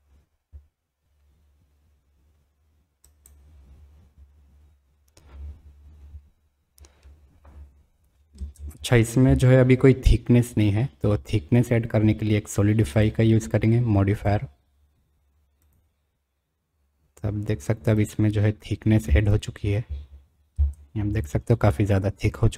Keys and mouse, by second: 8.6 space, 10.6 middle drag, 10.8 click, 14.3-18.4 drag, 19.0 space, 21.1 space.